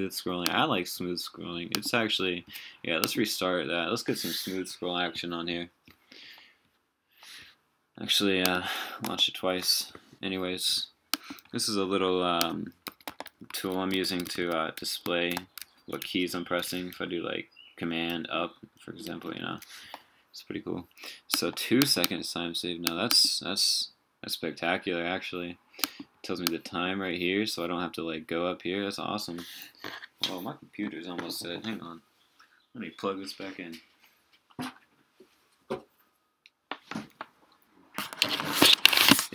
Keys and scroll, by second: 18.1 super+Up, 18.8 super+Down, 19.1 super+Left, 19.3 super+Right.